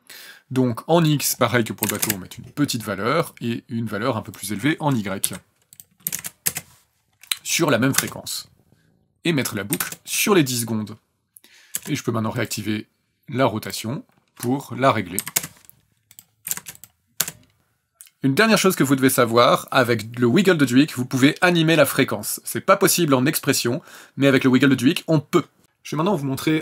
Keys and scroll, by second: 1.8 KP_1, 1.9 KP_0, 2.0 KP_Enter, 5.2 KP_5, 6.1 KP_0, 6.5 KP_Enter, 8.0 KP_0, 9.7 KP_1, 9.8 KP_0, 11.7 KP_0, 15.2 KP_3, 15.3 KP_Enter, 16.5 KP_0, 17.2 KP_0.